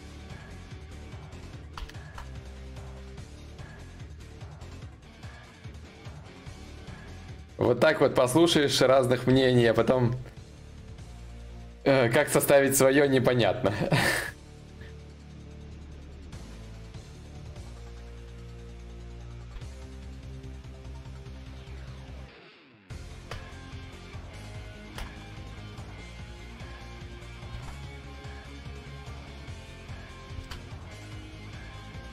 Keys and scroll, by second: 1.3 ctrl+z, 1.5 ctrl+z, 24.6 ctrl+z, 27.0 ctrl+z.